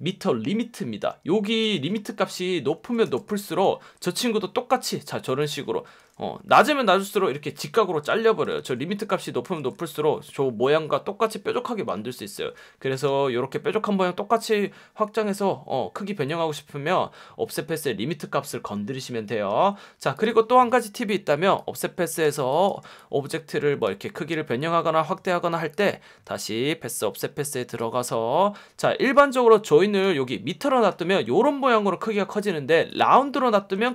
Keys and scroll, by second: 1.0 F1, 2.8-3.6 typing, 6.6 1, 8.4-10.0 typing, 13.1 F1, 19.5 F1, 22.4 space, 24.6 v, 29.1 F1, 30.9 F1, 33.7 F1.